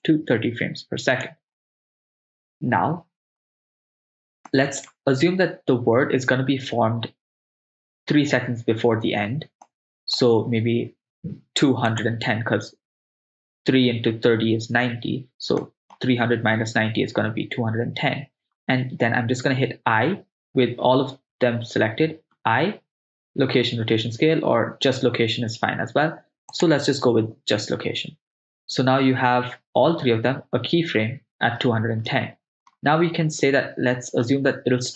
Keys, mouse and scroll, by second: 4.5-4.9 middle drag, 9.7-10.2 middle drag, 12.1 click, 15.6-16.0 middle drag, 19.9 i, 22.4 i, 32.1-32.7 middle drag.